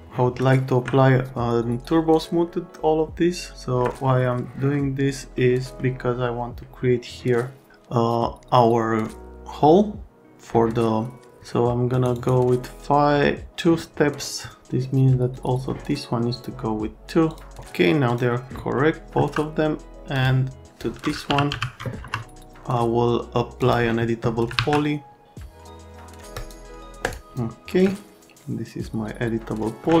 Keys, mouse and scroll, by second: 3.5 alt+right click, 4.3 right click, 5.4 right click, 11.9 click, 12.1 click, 15.4 click, 16.3 click, 17.3 click, 18.1 click, 18.7 middle click, 19.1 F3, 20.1 right click, 21.0-22.0 typing, 23.6 click, 24.5 alt+1, 26.3 right click, 27.0 scroll, 27.9 alt+middle click.